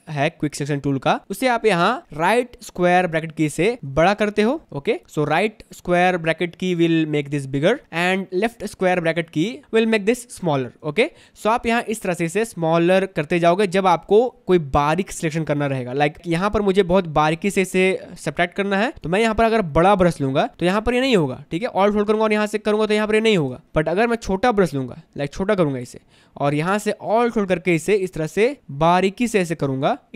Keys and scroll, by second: 4.0 ], 7.7 ], 9.3 [, 10.6 [, 11.8 space, 21.2 ctrl+z, 23.7 ctrl+z.